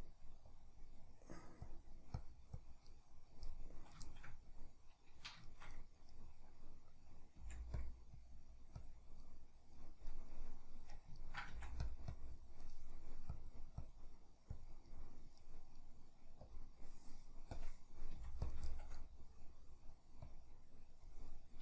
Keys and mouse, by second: 0.5-2.9 drag, 2.9-7.8 middle drag, 7.4 f, 8.2-9.2 drag, 9.2-11.9 middle drag, 11.5 f, 12.1 click, 12.7 middle click, 13.3-14.9 drag, 14.9-16.5 middle drag, 16.5-18.5 drag, 18.1 f, 18.7-20.3 shift+middle drag, 20.3-21.3 drag, 21.3-21.6 middle drag.